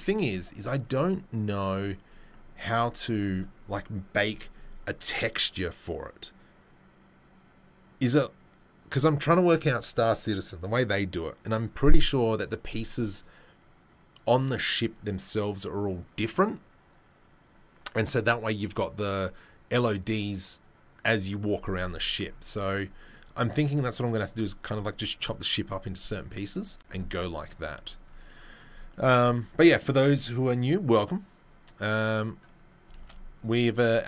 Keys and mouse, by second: 31.4-34.0 right drag, 33.0 shift+space.